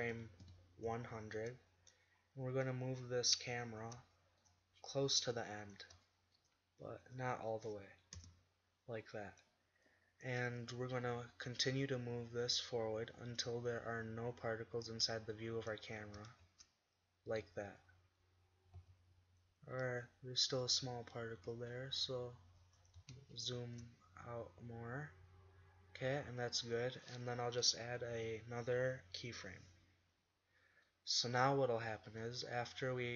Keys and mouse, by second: 0.5 Left, 0.9 Left, 2.6 z, 3.6-4.0 right drag, 5.1-5.7 drag, 7.2 drag, 8.2 KP_0, 9.0-10.8 middle drag, 11.0 g, 16.0 click, 16.5 shift+z, 18.8 z, 21.4 g, 22.8 click, 23.6 shift+z, 26.2 z, 28.2 i, 31.2-31.6 middle drag, 32.9-33.1 middle drag.